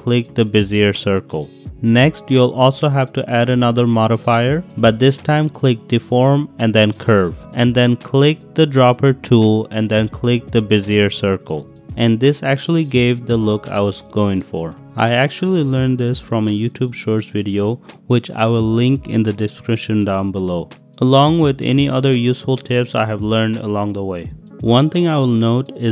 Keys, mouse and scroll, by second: 0.6 click, 3.2-7.3 drag, 8.9 click, 10.7 click, 13.0 g, 13.3 z, 17.6 click, 18.1 click, 19.3 g, 19.6 z, 21.4 middle click, 23.0-23.4 drag, 23.7-24.0 drag, 24.3 ctrl+z, 25.0 click, 25.1-25.9 middle drag.